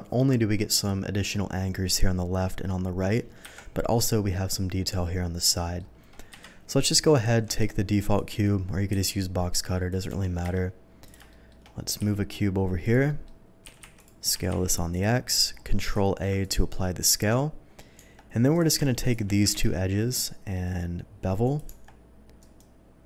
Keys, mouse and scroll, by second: 3.6 KP_1, 5.4 middle click, 6.4 KP_3, 7.3 shift+a, 8.1 click, 8.9 s, 9.8 click, 10.1 g, 10.4 y, 10.6 g, 11.0 click, 11.3 middle drag, 12.0 s, 12.8 click, 13.0 middle drag, 13.8 x, 13.9 click, 13.9 s, 14.4 x, 14.9 click, 15.2 middle click, 15.9 ctrl+a, 16.4 click, 16.7 middle click, 17.9 Tab, 18.5 click, 19.0 shift+click, 19.5 ctrl+b, 21.4 click, 21.6 Tab, 22.4 right click.